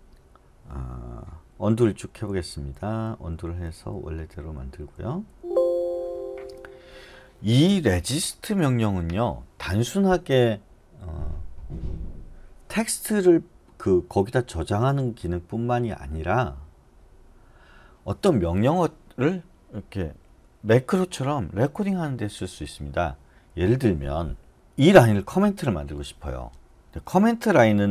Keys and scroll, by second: 1.9-5.3 typing.